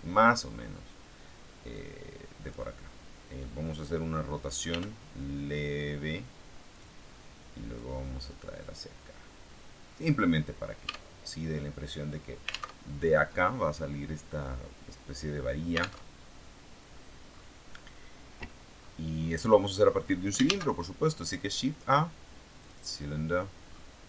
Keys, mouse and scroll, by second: 1.6-2.6 drag, 4.6 r, 6.6 click, 7.7-10.1 drag, 10.8 Tab, 12.7 alt+Tab, 15.9 alt+Tab, 17.0-18.1 scroll down 2, 18.7-19.3 scroll down 2, 19.3 scroll down 1, 20.3 shift+a, 22.6 click, 23.5-23.9 scroll down 2.